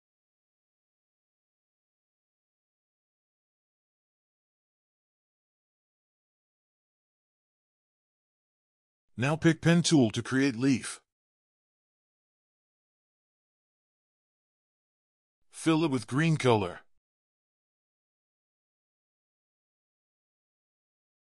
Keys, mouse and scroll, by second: 0.1-0.8 typing, 2.6 alt+click, 3.4 double click, 4.0 double click, 5.3 ctrl+click, 5.5 g, 8.5 ctrl+click, 9.5 ctrl+scroll down 1, 9.6 scroll up 1, 9.8-10.1 ctrl+scroll down 1, 10.1 p, 11.2-11.6 scroll down 2, 11.2 p, 11.6-13.4 scroll up 1, 15.5 v, 17.8-19.8 scroll up 1, 20.1 p.